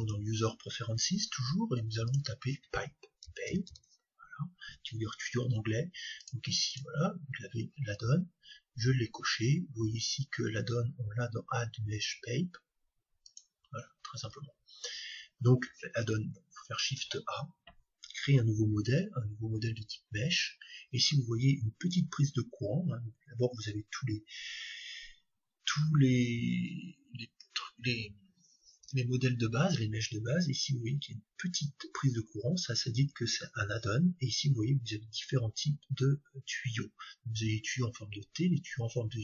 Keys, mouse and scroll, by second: 14.8-16.8 middle drag, 16.8 shift+a.